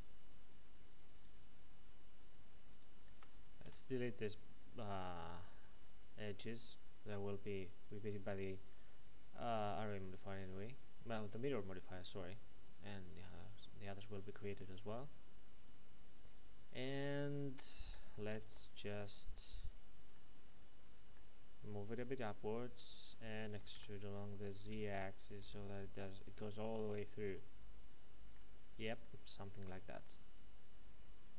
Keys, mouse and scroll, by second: 2.7 ctrl+right click, 3.6 x, 6.1 click, 12.2-13.1 scroll down 1, 13.1-13.6 scroll up 1, 13.9 shift+middle click, 17.4 shift+right click, 18.3 l, 20.1 middle click, 21.9 click, 23.5 typing, 25.3 click, 26.0 middle click.